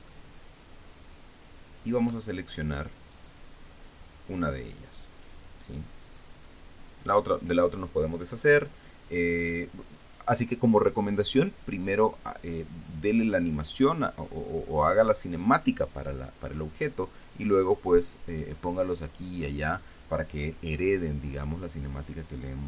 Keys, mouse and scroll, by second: 0.7-2.8 shift+middle drag, 3.6 right click.